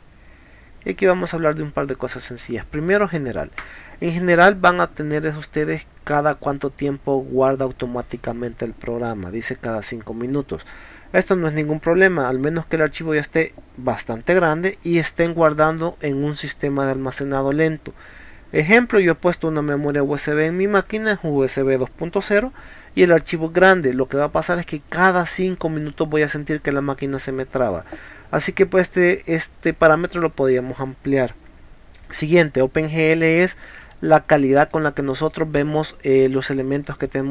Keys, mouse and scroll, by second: 0.9-1.5 drag, 3.1 click, 32.0 click, 34.4 click, 35.3 click, 35.7 scroll up 1, 36.8 click.